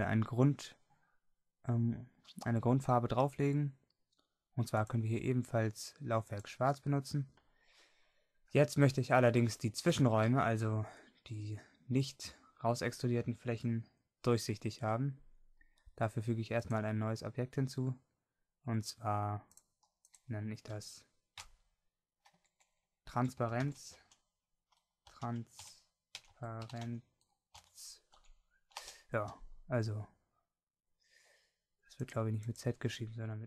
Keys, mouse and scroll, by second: 10.3-11.4 middle drag, 29.0-33.4 drag, 29.0-33.4 right drag.